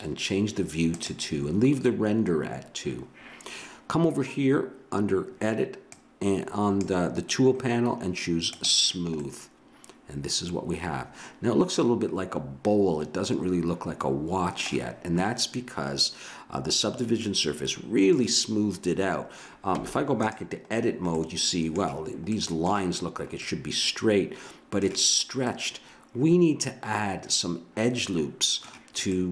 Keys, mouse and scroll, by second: 1.0-2.8 drag, 5.9-7.8 drag, 8.5 click, 9.2 middle click, 9.8 click, 10.3 middle click, 17.2-19.8 middle drag, 19.8 Tab, 20.7 middle click, 23.2 middle click, 27.1 middle click, 29.1-29.3 middle drag.